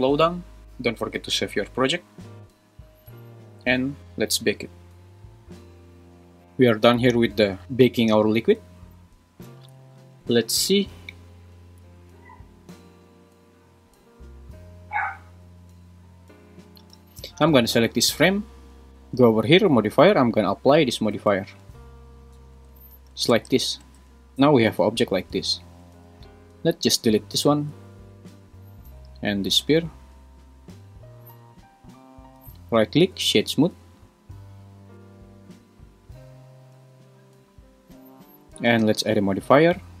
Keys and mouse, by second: 0.6 super+s, 1.2 super+s, 6.4 click, 10.3 Left, 10.8 Left, 11.0 Left, 11.2 Left, 11.4 Left, 11.9 Right, 12.4 Right, 12.7 Right, 12.9 Right, 13.5 Right, 13.7 Right, 14.0 Right, 14.2 Right, 14.4 Right, 14.6 Right, 15.3 Left, 15.5 Left, 15.7 Left, 15.8 Left, 16.0 Left, 21.8 super+a, 22.3 super+a, 23.3 space, 23.8 space, 24.6 g, 25.8 Escape, 27.3 x, 29.6 x, 33.0-34.5 right drag, 39.2-40.0 drag.